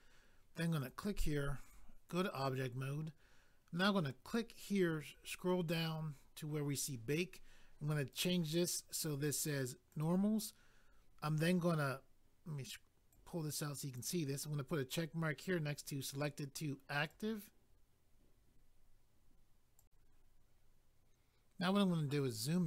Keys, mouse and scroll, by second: 0.8 click, 0.9 click, 1.6 click, 1.7 click, 4.2 click, 4.4 click, 5.1 scroll down 1, 8.2 click, 9.9 click, 10.0 click, 13.1 click, 17.1 click, 17.2 click, 19.8 click, 22.0 scroll up 1.